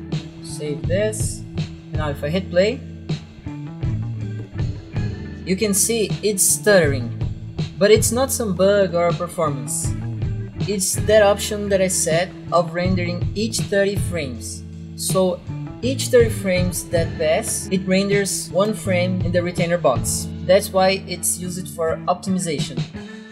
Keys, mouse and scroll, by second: 2.6 click.